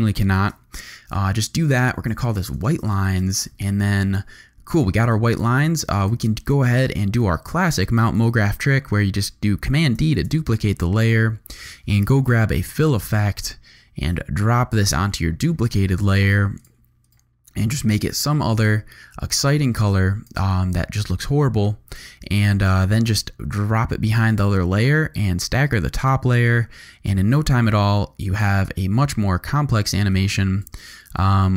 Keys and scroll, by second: 0.3 shift+super+c, 1.7-3.5 typing, 9.9 super+d, 11.9 f, 12.5 i.